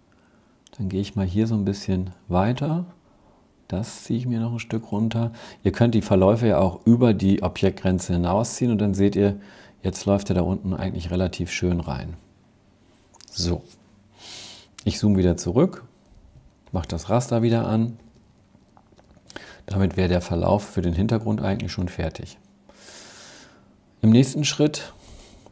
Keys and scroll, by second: 13.9 super+-, 14.5 super+-, 15.6 super+', 17.2 super+-, 17.8 super+-.